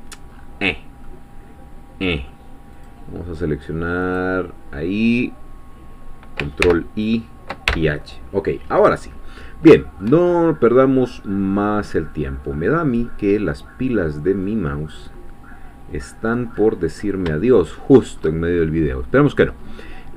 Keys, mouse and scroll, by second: 1.1-2.5 middle drag, 2.9-4.3 drag, 6.7 ctrl+i, 7.7 ctrl+h, 9.0-9.7 scroll down 2, 10.7 middle click, 11.1-11.6 scroll down 2, 13.1-13.5 scroll down 2, 13.5 middle click, 14.7-15.0 scroll down 2, 15.0-16.6 middle drag, 16.6-17.3 scroll up 2, 17.3 shift+scroll up 1, 17.4-18.7 shift+middle drag, 18.2-18.7 shift+scroll up 1, 18.7-19.5 scroll down 1, 19.6 scroll down 1.